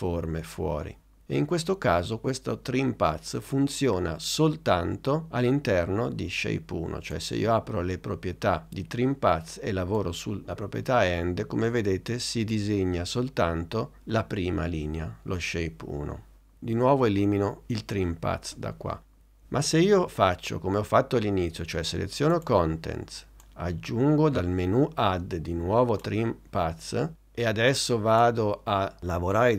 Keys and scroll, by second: 18.5 BackSpace.